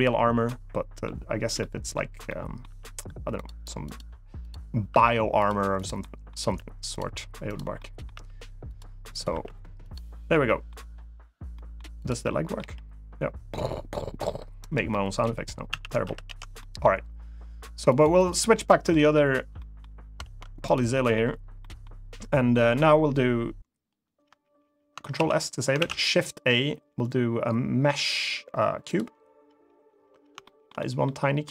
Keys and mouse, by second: 0.2-0.8 middle drag, 1.3-1.7 middle drag, 2.0-2.3 middle drag, 2.4 r, 3.1 click, 3.6 click, 4.6 r, 5.1 click, 5.5 drag, 5.7 middle drag, 6.2 r, 6.6 click, 7.2 click, 7.5 middle drag, 7.9 r, 8.4 click, 8.8 click, 9.3 r, 9.5 click, 10.0 middle click, 11.3 middle click, 11.7 click, 12.0 middle click, 12.3 g, 14.3 right click, 14.6-15.0 middle drag, 15.4 a, 15.8 alt+r, 16.0 alt+g, 16.3 middle drag, 17.6 click, 17.9 click, 18.6 middle drag, 19.3 middle drag, 20.0 ctrl+Tab, 20.4 click, 20.6 middle drag, 21.3 middle drag, 22.0 middle drag, 24.9 ctrl+s, 25.5 shift+a, 30.2 shift+middle drag, 30.5 middle click, 31.2 middle click.